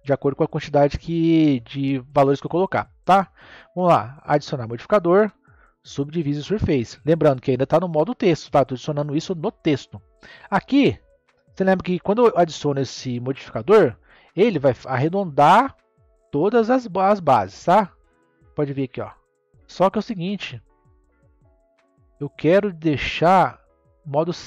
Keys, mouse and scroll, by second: 4.5-7.5 drag, 10.0-11.9 middle drag, 11.9-12.6 scroll up 3, 12.6-15.8 middle drag, 15.8-17.7 drag, 17.7-20.9 middle drag, 21.0-22.0 drag, 22.0-23.9 middle drag, 23.9 click.